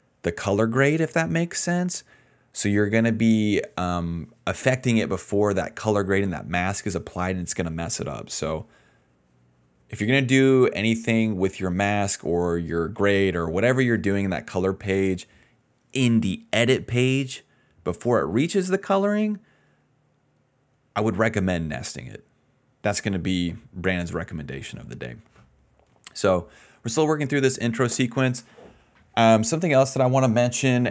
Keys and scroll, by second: 1.3 d, 8.1 s.